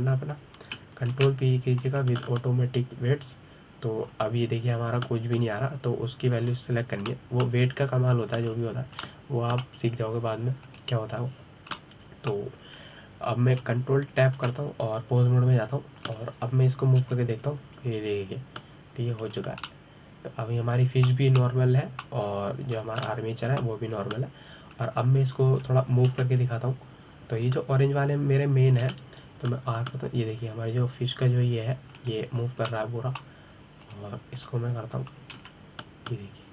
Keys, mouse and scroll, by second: 0.2 click, 1.5 a, 2.9 ctrl+p, 5.9-8.2 scroll down 2, 8.2-8.9 scroll up 5, 8.9-10.3 middle drag, 10.3 scroll down 2, 10.8-12.4 middle drag, 12.4 click, 13.5-16.2 middle drag, 16.2 ctrl+Tab, 17.8 click, 18.8 g, 21.5-24.1 middle drag, 24.1-24.6 scroll up 2, 24.6 scroll down 3, 24.9-27.9 middle drag, 27.9 KP_7, 29.2 click, 30.6 r, 34.2 scroll down 2, 34.5-35.6 middle drag, 35.6 click, 36.2 click.